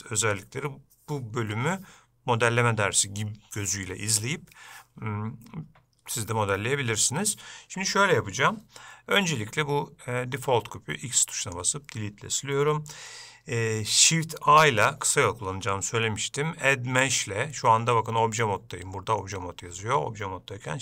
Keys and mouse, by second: 14.8 shift+a.